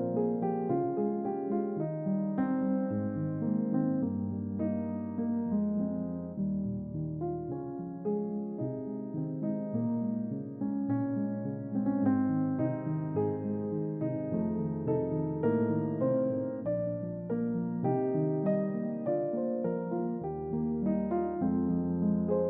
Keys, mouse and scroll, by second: 0.8-1.4 scroll up 1, 1.4-2.3 scroll up 1, 11.4 click, 13.5 click.